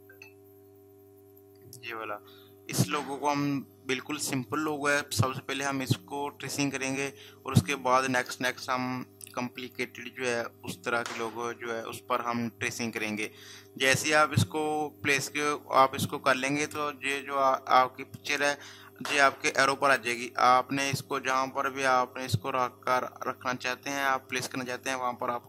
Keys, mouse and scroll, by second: 9.6 click.